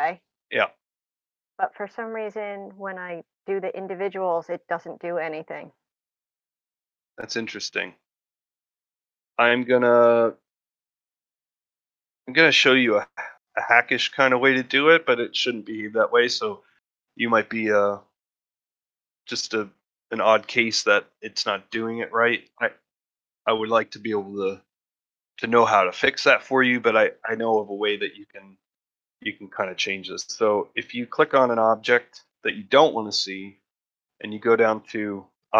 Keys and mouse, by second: 2.2 click, 3.1 click, 6.0 click, 8.3 click, 9.3 click, 27.4 click, 29.0 middle drag, 29.5 shift+middle drag, 30.4 middle click, 30.9 ctrl+middle drag.